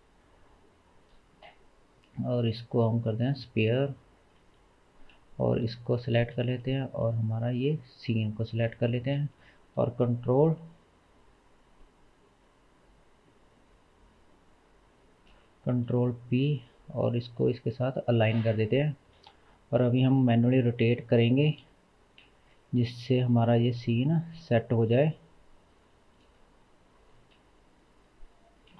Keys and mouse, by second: 2.1-5.0 drag, 4.4 s, 6.5 shift+middle click, 7.2-8.8 shift+drag, 9.8 ctrl+p, 12.9-14.1 shift+middle drag, 14.1-15.0 shift+drag, 15.9 ctrl+p, 18.1 click, 19.2 KP_1, 21.6 KP_3, 23.3 r, 27.1 r.